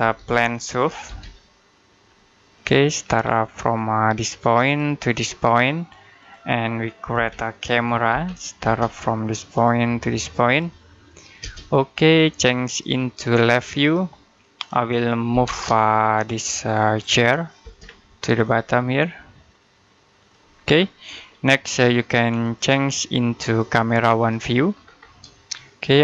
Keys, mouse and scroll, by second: 0.0-1.4 typing, 2.4 click, 2.9 scroll down 1, 3.2 middle click, 4.5 click, 7.0-8.5 typing, 9.4 click, 11.2 space, 12.5 click, 15.2 m, 15.3 space, 16.0 click, 17.5 space, 17.7-18.3 scroll up 1, 18.3 click, 20.5-21.0 scroll down 1, 21.0 middle click, 22.3 click, 24.6-25.2 scroll down 1, 25.3 shift+middle click.